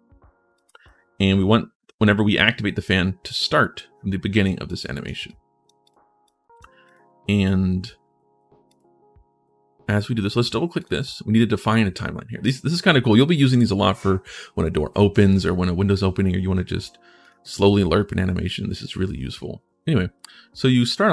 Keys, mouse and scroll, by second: 0.3 click, 2.6 click, 4.4 click, 5.0 click, 5.6 click, 6.0 click, 6.6 click, 8.4 click, 10.6 click, 10.7 click, 12.9 click, 15.1 click, 17.0 click, 17.3 click.